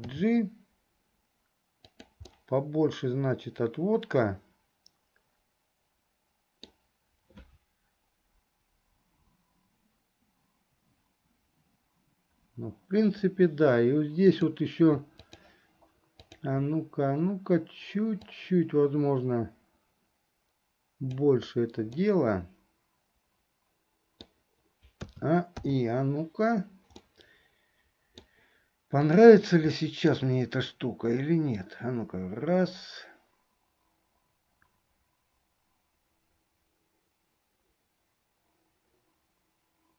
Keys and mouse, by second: 0.3 g, 2.4-7.0 middle drag, 14.4 click, 15.4 shift+click, 16.4 shift+click, 18.5-21.5 drag, 22.1-24.5 middle drag, 25.3 a, 27.1-28.4 middle drag, 29.3 click, 29.9 middle click, 31.8-39.9 drag.